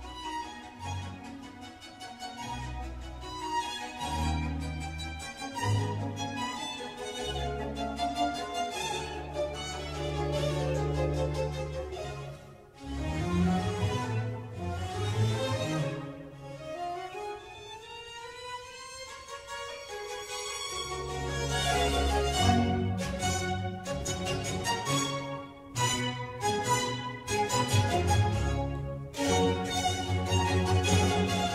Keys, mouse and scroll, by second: 3.4 click, 4.0 ctrl+r, 5.6 ctrl+r, 7.5 click, 8.1 ctrl+r, 15.0 click, 15.9 ctrl+r, 19.5 ctrl+r, 21.8 click, 23.2 ctrl+r, 25.1 ctrl+z, 25.9 ctrl+r, 28.5 click, 28.8 middle click, 29.3 Tab, 29.9-31.5 middle drag.